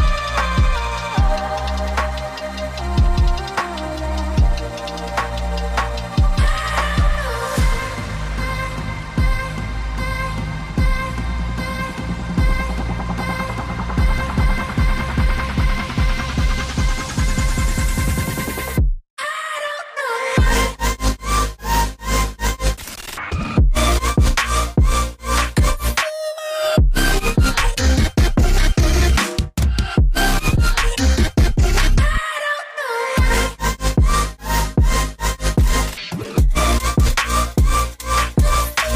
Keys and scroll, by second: 0.5 Tab, 2.1-2.9 typing, 20.5 typing, 23.3 typing, 25.4-26.1 typing, 37.4 typing, 37.7 Return.